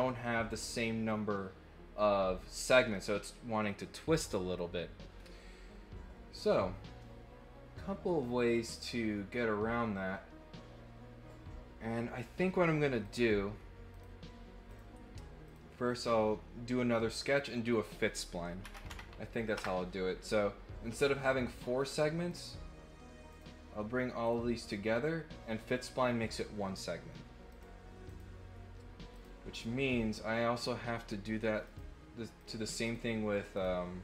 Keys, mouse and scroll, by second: 2.9-4.5 middle drag, 13.0 click, 13.9 click, 14.7 click, 15.4 click, 17.7 click, 21.8 click, 22.3 click, 23.3 click, 24.2 click, 24.9 click, 27.5 click, 28.0 click, 29.1 click, 29.5 click, 31.6 click, 32.3 click, 32.8 click, 33.5 click.